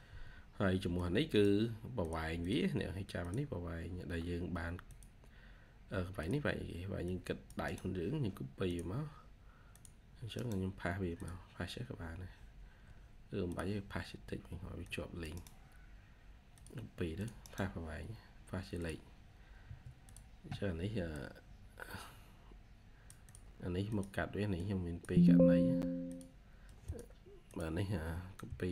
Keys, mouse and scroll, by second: 2.3 double click, 7.5 right click, 10.2 right click, 14.2 Escape, 15.2 right click, 16.6 typing, 17.3 right click, 18.8 typing, 19.5 Escape, 28.4-28.7 typing.